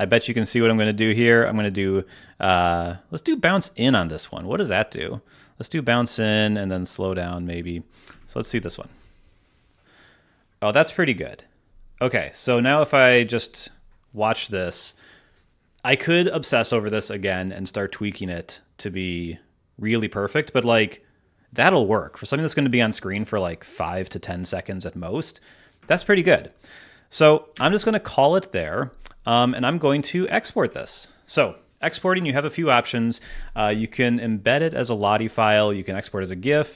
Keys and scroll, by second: 8.0 space, 8.7 space, 27.5 space.